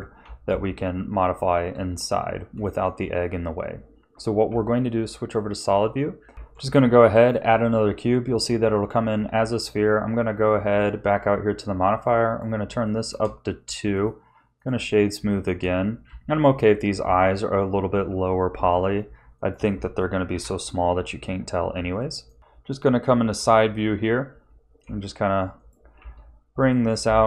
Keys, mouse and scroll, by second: 0.5 ctrl+s, 1.7 Tab, 2.6 shift+middle click, 4.4 z, 5.3 middle click, 6.3 shift+a, 8.7 Tab, 12.3 click, 12.8 shift+middle click, 13.9 right click, 15.3 shift+middle click, 16.0 Tab, 18.0 s, 20.3 KP_3, 21.3-21.7 scroll up 1, 22.0 shift+middle click, 22.4 z, 23.3 z, 24.8 g, 26.0 s.